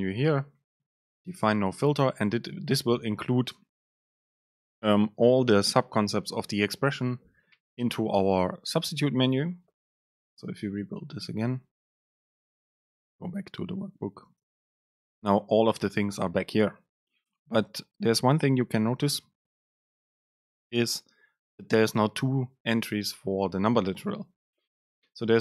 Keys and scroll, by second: 0.4 Right, 1.0 super+space, 1.6 Left, 14.5 super+space.